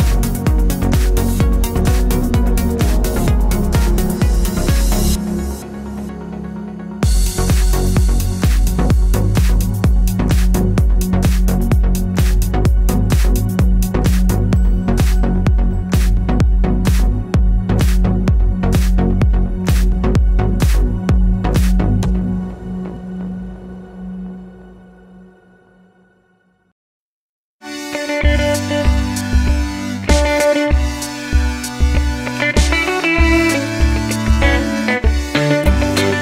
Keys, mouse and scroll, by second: 0.5-25.3 middle drag, 25.3 click, 25.7-26.5 middle drag, 26.5 click, 26.7-28.7 middle drag, 27.2 g, 28.7 click, 29.0 x, 29.4 click, 29.7 x, 29.8-31.6 middle drag, 31.0 scroll down 1, 31.6 click, 34.3-36.2 middle drag, 35.5 alt+d.